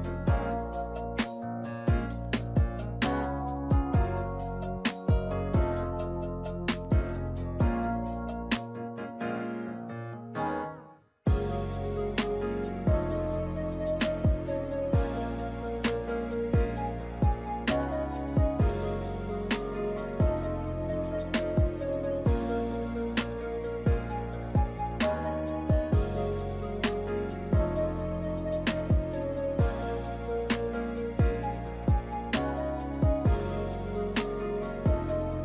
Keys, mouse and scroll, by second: 0.2 click, 1.6 click, 3.4 click, 5.4 click, 7.8 click, 8.3 click, 9.8 click, 11.4 click, 13.6 ctrl+middle click, 14.4 shift+middle click, 16.2 ctrl+middle click, 16.8 middle click, 17.4 h, 18.1 shift+a, 20.8 click, 21.9 click, 22.1 click, 23.1 click, 24.6 ctrl+2, 26.1 w, 28.2 s, 30.2 g, 33.1 alt+h, 34.2 alt+a, 34.5 shift+middle click.